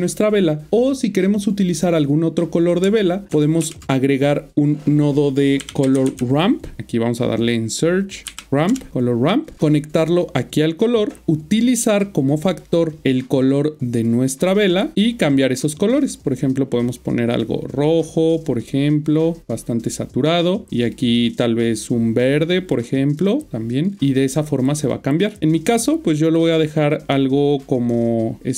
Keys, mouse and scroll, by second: 3.0 ctrl+right click, 4.2 click, 5.6-6.0 typing, 6.8 scroll up 1, 7.3 typing, 7.4 click, 8.4 typing, 8.7 Return, 9.5-28.4 click.